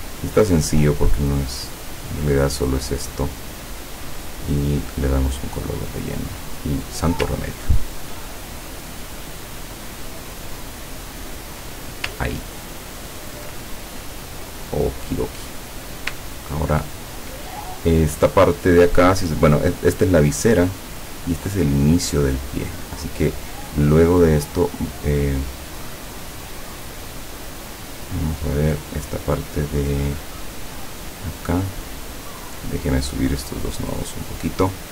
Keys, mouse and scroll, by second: 0.9 click, 2.2 click, 3.5 click, 4.8 click, 7.0 click, 7.6-8.1 ctrl+scroll up 2, 8.9-12.1 drag, 12.4 ctrl+scroll down 2, 12.9 ctrl+scroll down 2, 13.9 ctrl+click, 15.6 click, 16.1 ctrl+click, 16.4-16.9 ctrl+scroll down 2, 31.4 click, 32.2 click, 33.4-34.5 drag.